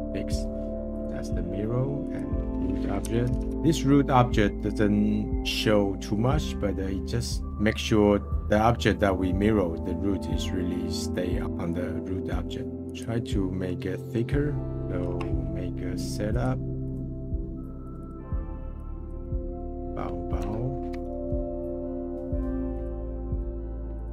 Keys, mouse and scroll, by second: 0.9-3.4 drag, 5.3-8.3 middle drag, 11.4-12.8 middle drag, 12.9 click, 13.3-14.5 middle drag, 14.5 scroll down 2, 14.8-19.1 drag, 22.8-24.1 drag.